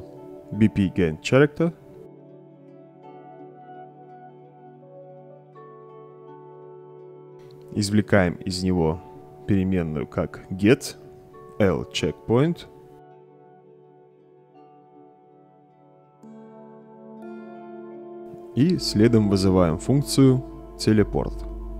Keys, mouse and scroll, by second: 0.0-3.1 typing, 3.7 Return, 4.5-5.5 drag, 6.3-6.7 right drag, 7.5-8.7 drag, 10.0-12.8 typing, 14.6 Return, 15.7-16.5 drag, 16.9-17.5 right drag, 19.1-20.3 drag, 21.6 t.